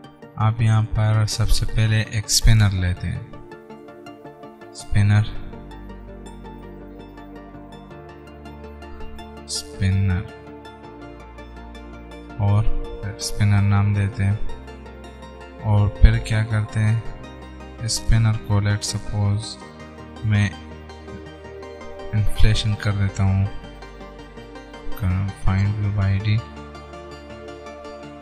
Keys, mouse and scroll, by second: 0.8 Return, 3.7 Return, 4.0 shift+s.